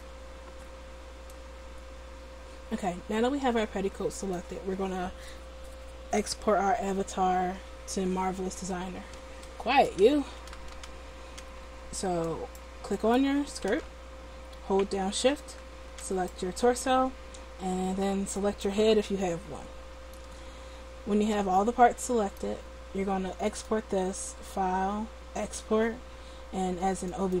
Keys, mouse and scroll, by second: 12.4-20.3 right drag, 23.5-27.4 drag.